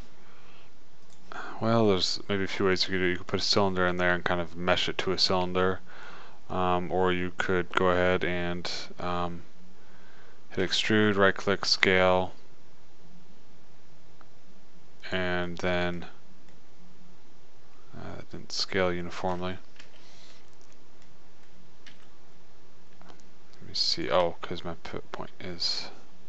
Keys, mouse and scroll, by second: 0.9-2.2 middle drag, 5.6 middle click, 11.1 e, 12.2 s, 16.1-18.2 middle drag, 18.9 middle click, 20.2 ctrl+z, 22.3 s, 25.4-26.2 middle drag.